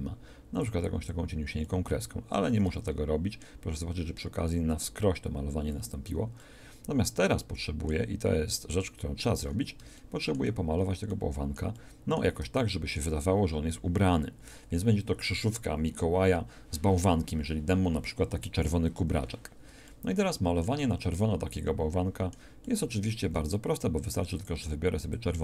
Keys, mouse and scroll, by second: 0.2-2.2 drag, 2.3 click, 2.5 click, 5.6 ctrl+z, 23.3 f, 25.3-25.4 drag.